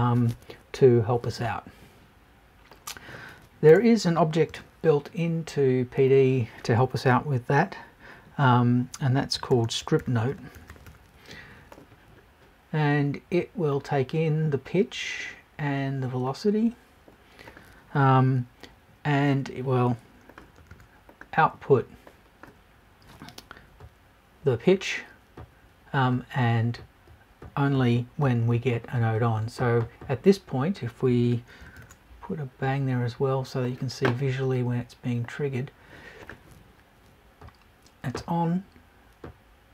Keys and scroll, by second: 3.7 BackSpace, 4.4 super+BackSpace.